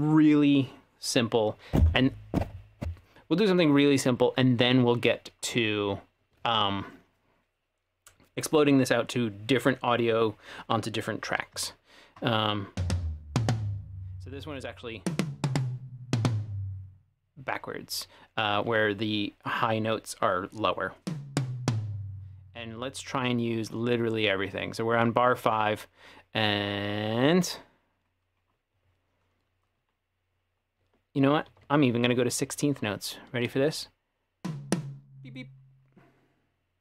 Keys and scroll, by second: 31.5 ctrl+5.